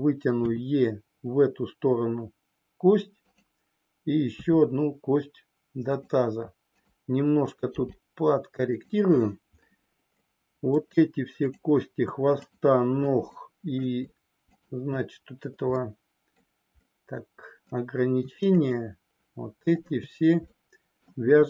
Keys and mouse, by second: 0.3 e, 4.4 e, 8.6 click, 10.1 middle click, 11.3 click, 13.3 middle click, 15.6 middle click, 16.8 middle click, 18.6 shift+click, 20.4 middle click.